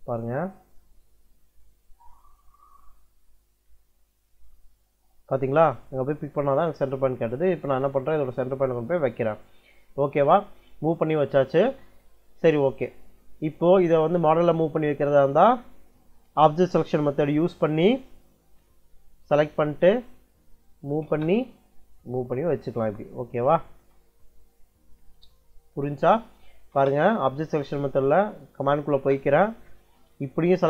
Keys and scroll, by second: 20.7 m, 20.9 space, 26.5 u, 26.6 space, 28.5 m, 28.8 space.